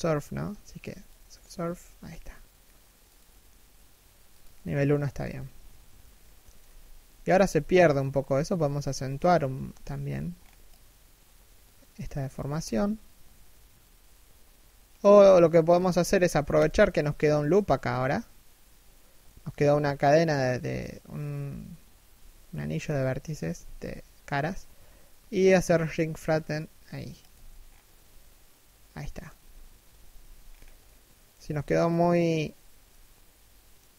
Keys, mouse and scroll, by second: 4.5-4.8 scroll up 1, 5.2 middle click, 6.2 3, 6.7 1, 6.9 z, 8.3 b, 8.8 a, 9.3 b, 12.2 alt+s, 14.7 z, 16.2 alt+right click, 18.8 middle click, 19.2 z, 19.4 middle click, 21.7 KP_1, 22.4 z, 23.2 alt+s, 27.2-27.7 scroll down 1, 27.7 middle click, 28.9 3, 29.4 1, 30.0-30.4 scroll up 1, 30.4 middle click, 32.4 middle click, 33.7-33.9 scroll down 1.